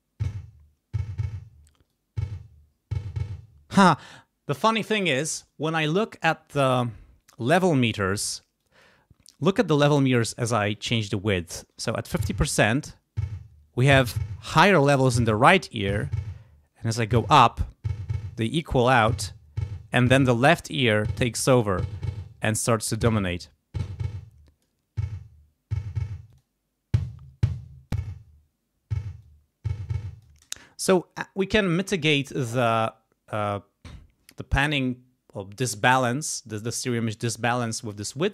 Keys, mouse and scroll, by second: 1.9-3.9 drag, 3.9 space, 8.6 click, 10.7 click, 11.7 space, 15.9-22.2 drag, 23.8 click, 26.3 click, 27.9 click, 29.2-30.4 scroll up 1, 30.4 space.